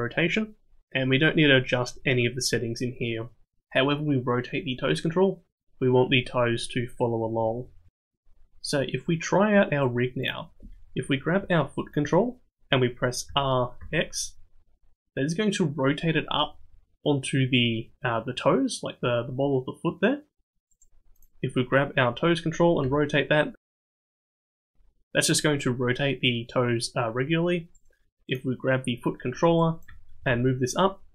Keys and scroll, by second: 13.3 r, 22.8 r, 30.2 g.